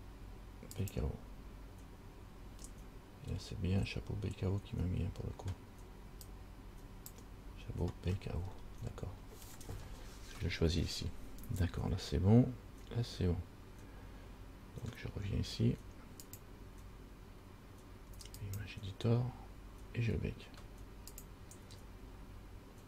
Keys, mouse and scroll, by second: 6.5 click, 8.3-9.6 scroll up 5, 10.1-10.4 scroll down 2, 16.4 click, 21.3 click.